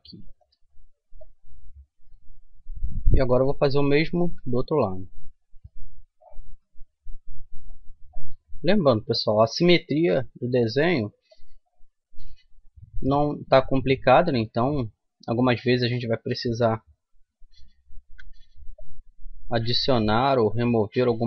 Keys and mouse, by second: 1.2-2.7 drag, 2.7 middle click, 3.1-4.7 right drag, 4.3 e, 4.7 click, 6.5 s, 8.5 g, 9.9 s, 12.9 g, 15.9-17.6 right drag, 17.6 middle click, 18.0 ctrl+r.